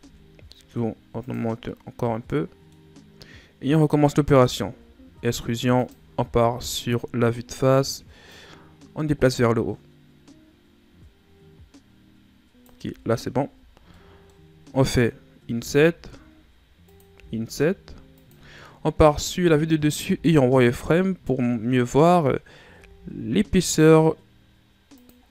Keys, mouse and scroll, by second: 1.5 scroll down 4, 1.7-2.9 middle drag, 2.9 scroll up 4, 4.4 e, 6.5 KP_1, 8.3-11.3 drag, 13.2 shift+scroll up 5, 13.9-15.5 middle drag, 15.5 i, 17.1 i, 19.0 KP_7, 20.1 z, 20.7-22.7 scroll up 4, 22.7 s, 25.2 scroll down 4.